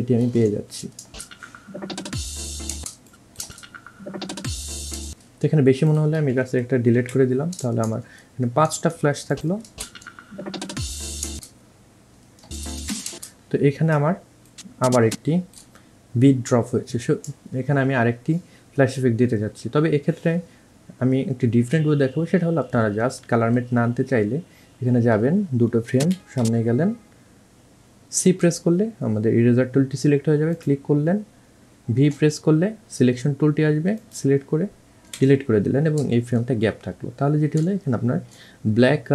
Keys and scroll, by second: 1.4 space, 3.7 space, 5.3 space, 7.3 Delete, 10.1 space, 13.4 space, 26.3 Right, 28.5 c, 35.4 Delete.